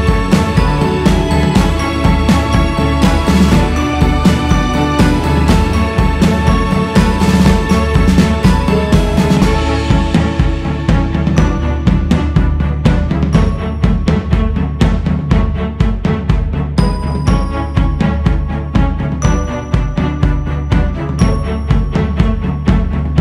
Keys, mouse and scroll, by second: 0.6-3.7 drag, 5.8-9.0 drag, 10.5-10.9 scroll down 2, 11.6-16.7 drag, 17.6 shift+s, 17.9 f, 19.0-23.2 drag.